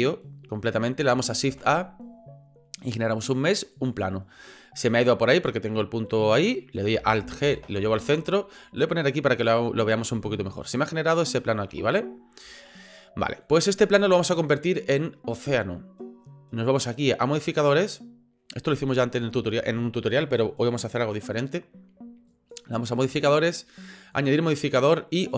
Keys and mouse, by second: 1.7 shift+a, 7.4 alt+g, 8.7 click, 10.2 shift+middle drag, 11.6 shift+middle click, 12.7-13.4 shift+middle drag, 22.3 click, 23.0 click, 24.1-25.3 drag.